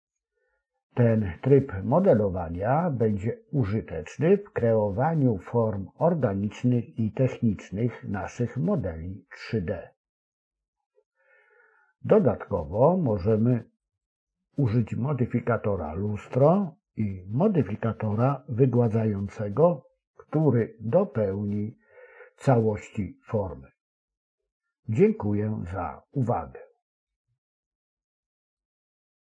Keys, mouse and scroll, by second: 0.9-2.8 drag, 3.4-6.0 drag, 6.4-7.9 drag, 6.5 Left, 6.6 Left, 6.7 Left, 6.9 Left, 9.1 click, 11.4 Left, 13.6 click, 14.5 click, 16.7 Left, 20.3 Left, 20.3 click, 22.1 click, 24.6 click, 26.9 click.